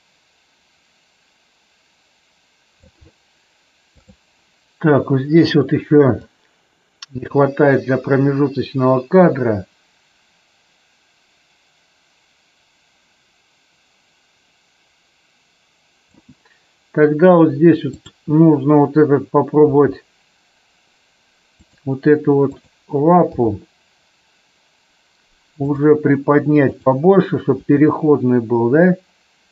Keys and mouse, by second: 6.2-16.2 drag, 17.8-18.3 drag, 19.6 r, 21.6 click, 23.2 g, 25.6 click, 26.6 click, 27.6 r.